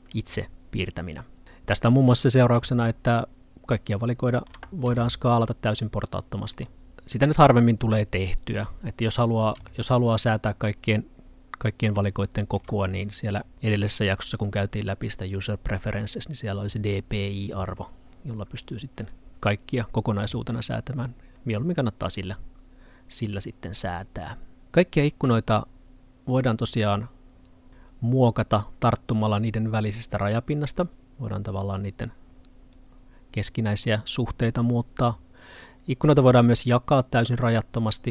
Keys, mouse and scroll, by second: 2.7 middle click, 6.9 middle click, 27.7 click.